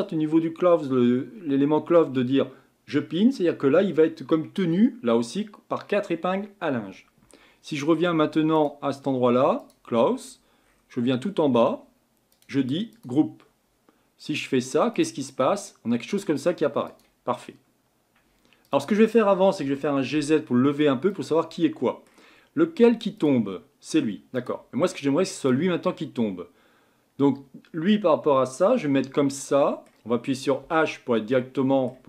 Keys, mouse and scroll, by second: 10.2-12.2 scroll down 20, 12.2 scroll down 1, 12.3-17.3 drag, 17.3-18.6 middle drag, 18.6 click, 19.6 g, 21.5-23.2 middle drag, 23.2-28.4 drag, 28.9 Tab, 29.4-30.6 middle drag, 30.6 KP_Divide, 31.3-32.0 middle drag.